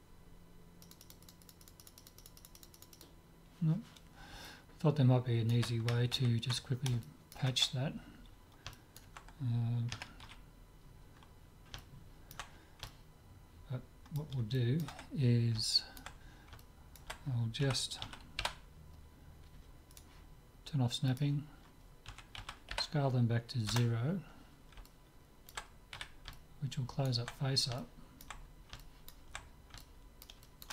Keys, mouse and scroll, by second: 4.9-6.3 middle drag, 6.3 ctrl+z, 7.1-10.0 middle drag, 10.0 KP_Decimal, 10.4 z, 11.1 middle click, 17.7 middle click, 17.7 s, 21.1-22.9 drag, 22.1 s, 24.9-30.7 middle drag, 26.0 z.